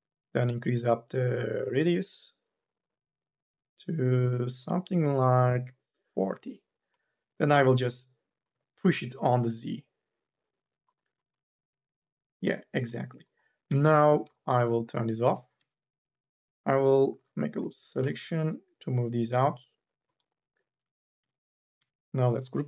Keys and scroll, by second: 8.7 ctrl+z, 13.7 3, 15.3 2, 15.7 e, 16.9 u, 17.3 l, 17.6 e, 21.0 q.